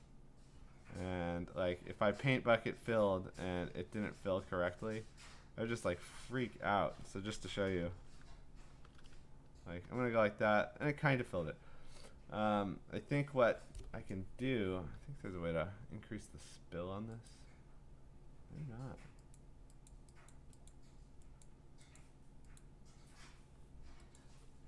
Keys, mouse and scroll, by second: 1.3 click, 3.2 click, 5.3 click, 7.8 g, 8.7 g, 10.0 click, 17.3 click, 19.3 click, 19.9 click, 20.3 click, 20.7 click, 21.4 click, 22.0 click, 22.6 click, 24.2 click.